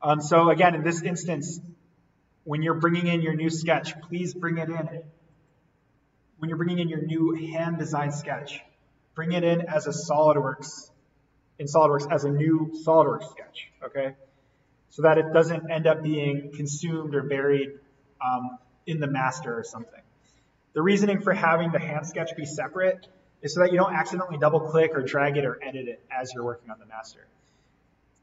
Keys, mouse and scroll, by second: 0.6-4.0 drag, 5.2 right click, 9.3 click, 12.4 right click, 13.6 click, 14.5 right click, 15.9-17.4 scroll up 1, 17.5 right click, 18.4 click, 20.3-22.5 scroll down 1.